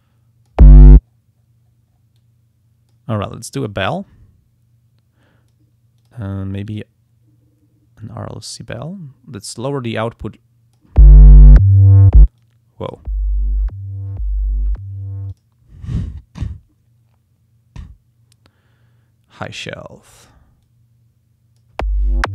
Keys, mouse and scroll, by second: 1.1-1.9 scroll down 3, 2.2-3.2 drag, 3.6-5.7 drag, 6.0 click, 6.7 click, 8.0 click, 9.6-11.2 drag, 12.4 click, 15.3 click, 19.3 click, 20.6-21.8 drag.